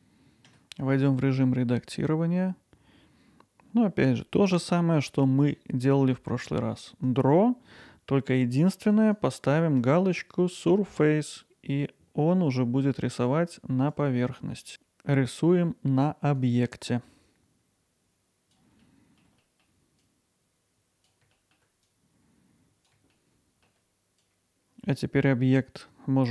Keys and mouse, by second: 0.5 Tab, 7.0-15.4 drag, 15.5-17.0 alt+middle drag, 17.9 click, 18.9 middle click, 19.0 click, 19.5 alt+middle click, 19.6 click, 20.2 alt+middle click, 20.4 click, 20.7 alt+middle click, 20.9 click, 21.4 click, 22.1 click, 23.1 click, 23.5 alt+middle click, 23.7 alt+middle click, 24.0 Tab.